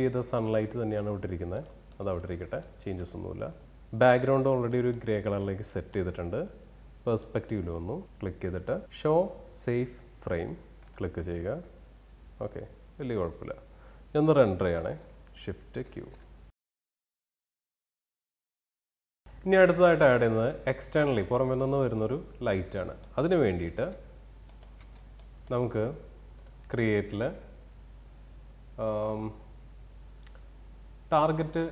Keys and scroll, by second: 15.3 shift+q, 22.1 alt+w.